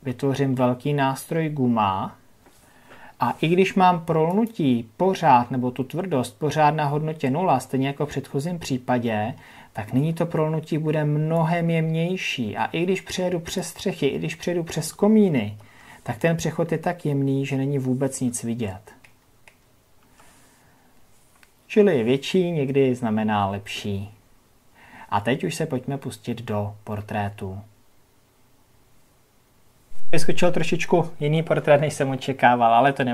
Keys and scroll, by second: 15.1 ctrl+KP_Add.